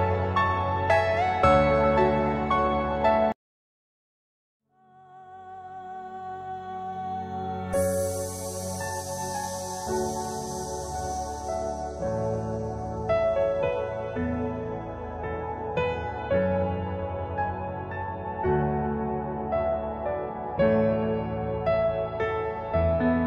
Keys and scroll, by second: 1.0 Escape, 3.2 c, 3.7 Escape, 3.9 F2, 12.5 F6, 18.6-20.3 typing.